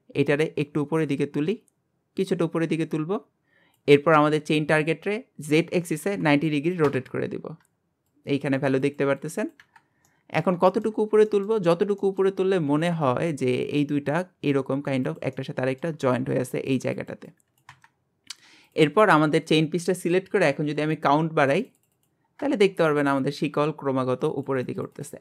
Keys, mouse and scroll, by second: 0.7 click, 10.1 middle click, 11.0-12.0 scroll up 3, 11.3 middle click, 12.0 shift+middle click, 12.4-12.7 scroll up 1, 12.7 g, 15.3 scroll up 1, 15.4-18.0 middle drag, 18.0 scroll down 2, 18.7 click, 21.4 click, 22.3 scroll down 3, 22.6-24.2 shift+middle drag, 24.2-25.2 drag.